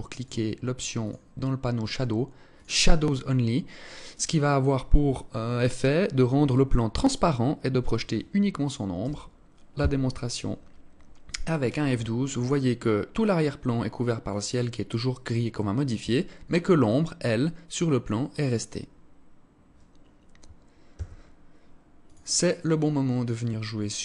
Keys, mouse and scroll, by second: 0.5 click, 0.9 scroll down 4, 2.1 click, 20.4 Escape, 21.5 click, 22.7 scroll down 2.